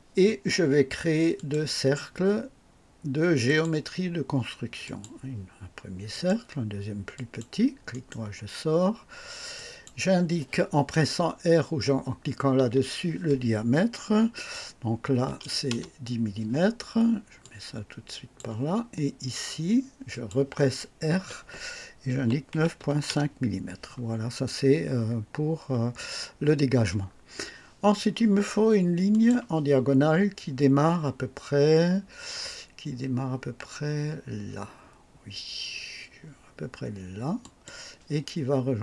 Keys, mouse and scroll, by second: 1.3 click, 3.4 click, 4.8 click, 6.1 click, 7.1 click, 7.9 right click, 9.5 click, 12.5 r, 15.1 KP_1, 15.4 KP_0, 15.7 KP_Enter, 17.4-18.5 drag, 20.1 click, 21.1-24.1 typing, 23.1 KP_Enter, 26.0 scroll up 1, 27.0 scroll down 1, 29.1 click, 37.4 click.